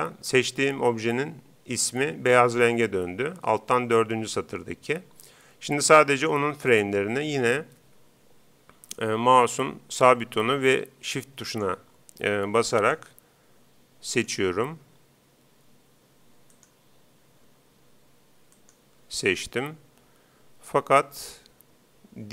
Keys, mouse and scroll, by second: 6.2-7.8 right drag, 11.5-15.8 right drag, 16.5-18.1 right drag, 18.5-20.1 right drag.